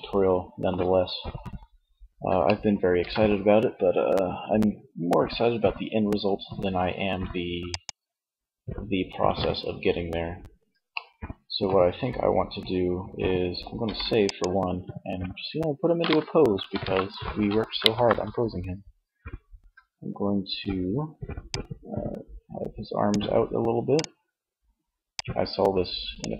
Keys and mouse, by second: 1.6-3.0 middle drag, 9.9 middle click, 12.9 ctrl+s, 20.6-22.3 drag, 24.3 middle click, 24.9-26.1 drag, 26.1 KP_1.